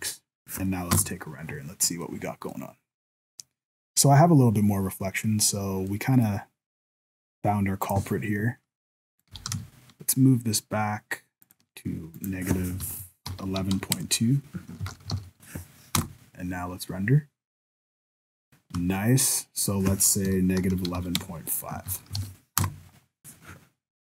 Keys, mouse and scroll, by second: 1.0 F12, 9.1 right click, 9.3 g, 12.2 click, 13.4 KP_1, 14.8 ctrl+s, 15.1 alt+a, 16.0 F12, 19.6 click, 20.7 KP_1, 21.9 ctrl+s, 22.2 alt+a, 22.6 F12.